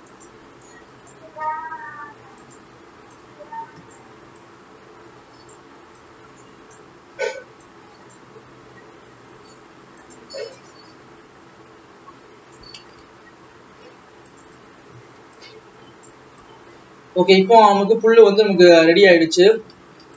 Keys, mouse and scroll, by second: 0.8-1.9 drag, 1.9 g, 3.3-6.2 drag, 9.0 g, 10.7-13.3 drag, 13.3 alt+a, 13.5 alt+scroll down 1, 14.4 click, 15.3 Tab, 15.4-16.6 drag.